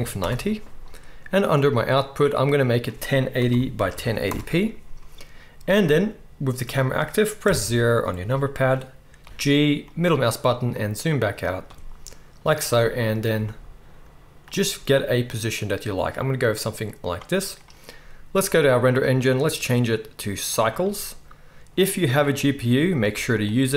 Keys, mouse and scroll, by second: 1.7 right click, 7.4 KP_0, 9.2 g, 12.6-14.4 drag, 13.3 g, 14.4-18.4 right drag, 14.7 g, 18.4 middle click, 18.5-19.3 right drag, 19.3-23.4 middle drag.